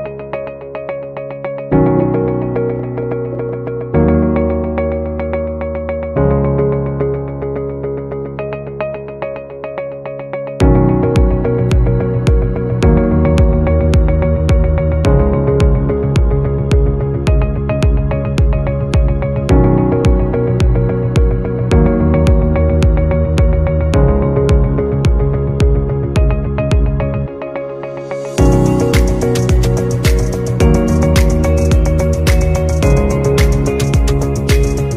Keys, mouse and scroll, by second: 2.3-3.8 typing, 5.8 right click, 7.0 right click, 16.7 shift+click.